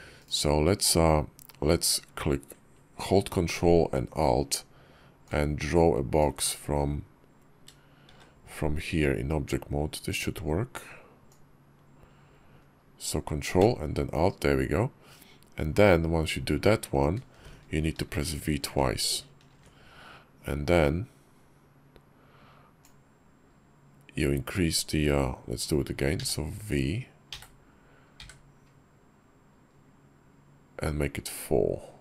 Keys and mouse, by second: 5.1-6.1 ctrl+alt+drag, 7.9 shift+v, 11.1-23.5 ctrl+drag.